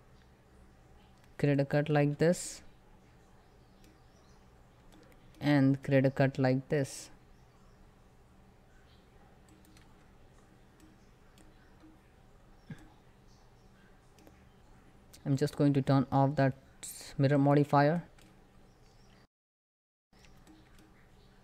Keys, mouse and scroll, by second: 14.2 middle click, 14.4 scroll up 1, 16.0 click, 16.5 scroll down 1, 18.1 click, 18.6 shift+middle click, 18.8 scroll up 1, 20.2 shift+middle click, 20.7 scroll up 1.